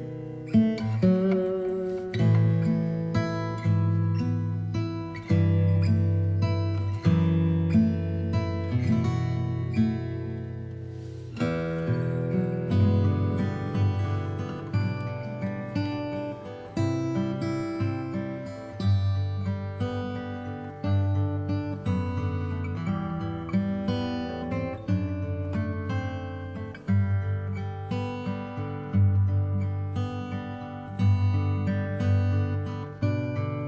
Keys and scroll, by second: 4.1 b, 4.8 alt+space, 5.3 x, 6.0 space, 9.3 alt+v, 13.7 ctrl+t, 18.7 b, 21.3 space.